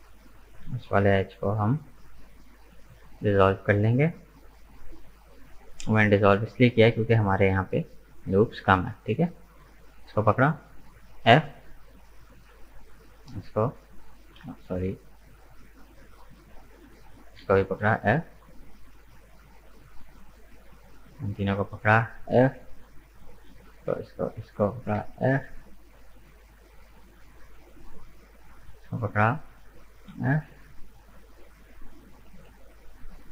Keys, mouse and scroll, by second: 1.1 Delete, 3.6 right click, 7.2-8.6 middle drag, 8.6 right click, 9.4 shift+right click, 9.8-10.8 middle drag, 10.8 f, 11.5 right click, 12.4 right click, 13.0 shift+right click, 13.9 f, 14.6 ctrl+z, 16.7 shift+right click, 17.4 f, 18.0-19.0 shift+middle drag, 19.0 right click, 19.9 shift+right click, 20.4 shift+right click, 20.7-21.9 middle drag, 21.9 f, 23.2 right click, 23.7 shift+right click, 24.3 shift+right click, 25.0 f, 25.7 right click, 26.4 shift+right click, 26.9 shift+right click, 27.2-29.3 middle drag, 29.3 f, 30.0 right click, 32.2-33.3 middle drag.